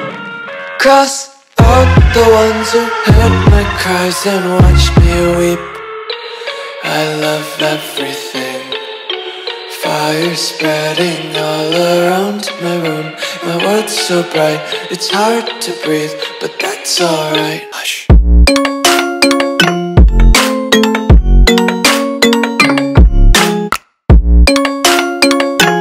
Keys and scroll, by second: 0.4-0.7 alt+super+space, 0.8 alt+super+space, 0.9 alt+super+space, 1.1 alt+super+space, 1.2 alt+super+space, 1.7 alt+super+space, 1.9-2.6 alt+super+space, 2.6 super+space, 2.7 super+space, 2.8 super+space, 3.0 super+space, 3.1 super+space, 3.2 super+space, 3.4 super+space, 3.6 super+space, 3.7 super+space, 4.3 super+space, 4.7 super+space, 22.8 Delete, 23.4 Escape, 24.1 space, 24.6 alt+super+space, 24.7 alt+super+space, 24.8 alt+super+space, 24.9 alt+super+space, 25.0-25.8 alt+super+space.